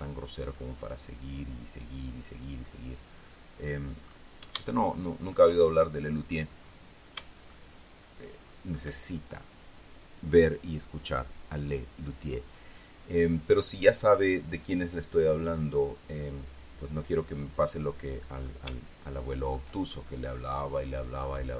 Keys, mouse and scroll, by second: 5.2 shift+middle click, 6.5-7.1 shift+scroll up 1, 7.1-7.6 scroll up 1, 7.6-8.0 scroll down 1, 8.0-9.7 shift+middle drag, 19.3-20.3 shift+middle drag, 20.7-21.5 scroll up 2.